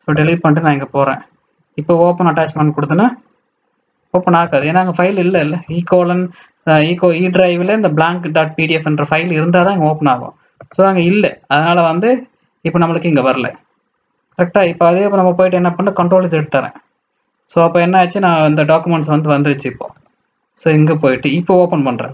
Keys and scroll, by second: 14.6 alt+Tab, 16.0 ctrl+scroll, 16.2 ctrl+z, 19.9 alt+Tab, 20.1 alt+Tab.